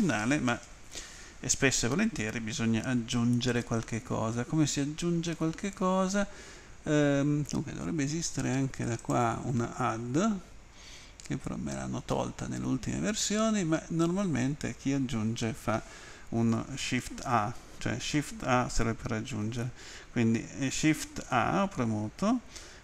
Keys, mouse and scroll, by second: 9.0 click.